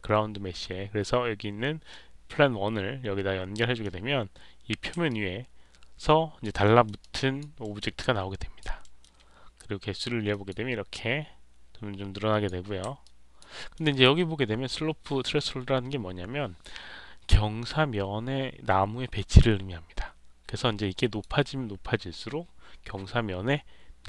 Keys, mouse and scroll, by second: 1.8-3.7 middle drag, 5.0-6.3 alt+drag, 6.5 alt+middle click, 6.9 alt+click, 7.5 alt+middle click, 7.9 alt+click, 8.7 alt+middle click, 10.2 click, 10.8-12.4 drag, 13.0 alt+click, 13.5 alt+middle click, 13.8 alt+click, 20.9 click.